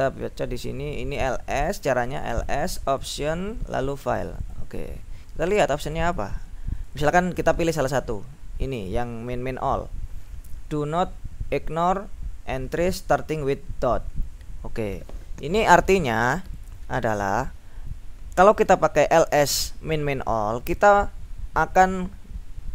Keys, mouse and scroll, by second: 1.2-3.7 drag, 4.1-5.3 drag, 5.9 click, 6.9 click, 8.8 click, 16.5 click, 18.6 click.